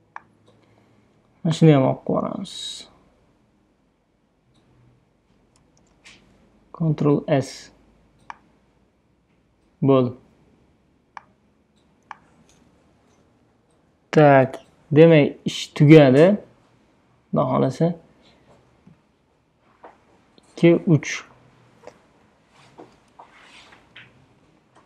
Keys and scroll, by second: 5.9 super+d, 6.8 super+s, 23.9 super+g.